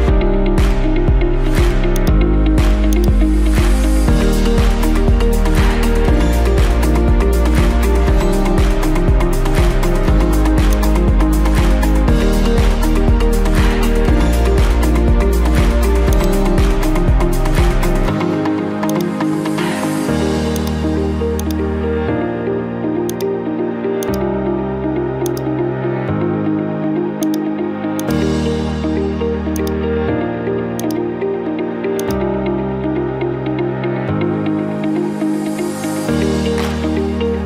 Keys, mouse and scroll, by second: 0.3-0.9 scroll, 1.9 click, 3.0 click, 6.2-7.2 typing, 7.8 Return, 9.2-10.3 middle drag, 10.8-11.9 drag, 12.8 middle click, 13.5 scroll, 14.5-15.6 scroll, 15.7 scroll down 1, 16.2 click, 18.9 right click, 20.6 click, 21.4 click, 21.5 click, 21.6 right click, 23.2 click, 24.1 click, 25.3 click, 27.3 click, 28.0 click, 29.6 click, 30.9-33.2 drag, 34.4 8, 35.0 Return, 36.1 Return.